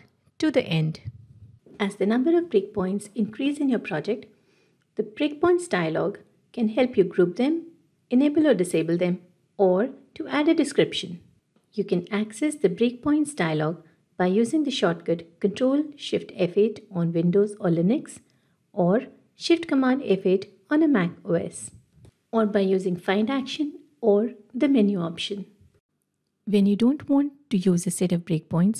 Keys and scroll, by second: 15.1 ctrl+shift+F8, 18.4 ctrl+shift+F8, 19.9 ctrl+shift+a, 25.0 ctrl+shift+F8.